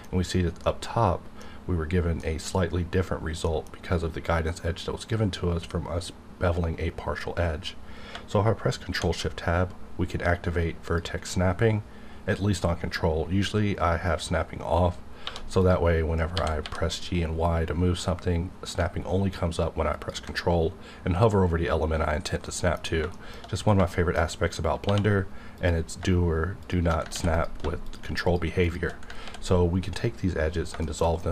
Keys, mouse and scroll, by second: 3.4 middle click, 3.7-4.6 scroll up 1, 8.2 shift+Num_Lock, 8.2 scroll up 1, 8.9 shift+Right, 10.8 click, 15.3 1, 15.6 click, 16.3 g, 16.6 y, 19.9 ctrl+click, 21.9-22.5 scroll down 1, 22.5 middle click, 23.4 shift+scroll up 1, 23.9 shift+middle click, 24.2-24.8 scroll up 1, 24.8 2, 25.6 click, 26.6 shift+click, 27.1 ctrl+x, 27.3 click, 27.8 shift+click, 28.6 shift+click, 29.2 ctrl+x, 30.5 scroll down 1, 30.8 shift+middle click, 31.2 middle click.